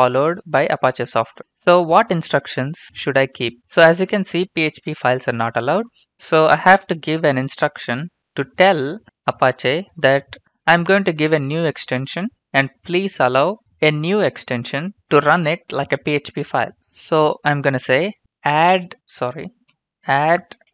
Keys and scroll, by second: 1.6 Return, 1.8 Return, 18.0-20.7 typing.